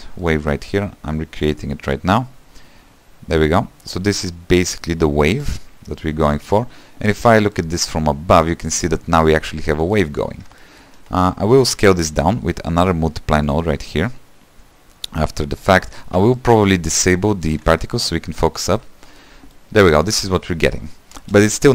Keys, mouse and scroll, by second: 6.8-7.4 scroll up 3, 7.4 scroll down 2, 7.6-12.1 middle drag, 12.1 q, 13.6-17.5 drag, 17.5 ctrl+right click, 18.6 shift+middle click, 19.0 scroll up 1, 19.2-21.2 middle drag, 21.2 space.